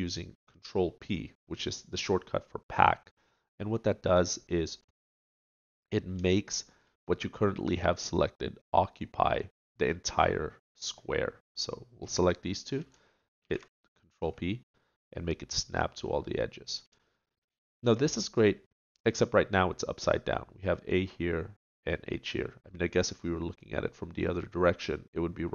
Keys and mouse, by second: 13.4 ctrl+p, 18.9-25.5 middle drag.